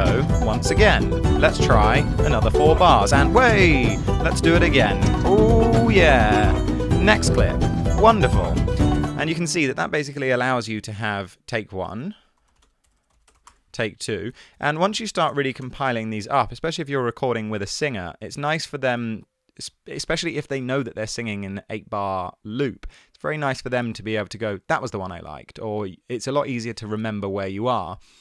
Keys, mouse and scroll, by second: 9.7 space, 11.9 super+r, 12.4-13.5 typing, 14.4 super+r, 14.6-16.1 typing.